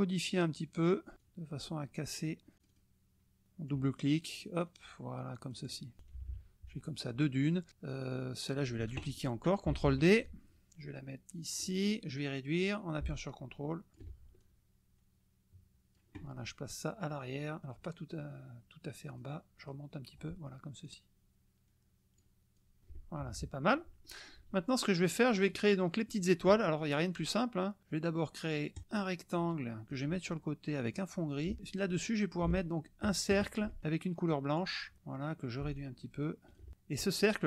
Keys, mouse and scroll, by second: 0.4-0.9 scroll down 1, 1.2-2.5 drag, 2.6 click, 3.4 click, 4.6 click, 4.8-5.8 scroll down 1, 6.0 KP_Subtract, 7.0 click, 7.5 click, 8.1 click, 9.8 ctrl+d, 10.2-11.7 ctrl+drag, 12.6-14.1 drag, 14.4-16.1 ctrl+drag, 19.1 click, 19.6 click, 20.8-22.4 drag, 22.6 click, 23.2 KP_Subtract, 24.0 middle click, 24.8 middle click, 28.7 click, 29.3 click, 31.0 click, 32.4-33.8 ctrl+drag, 34.5 click, 35.7-36.7 ctrl+drag.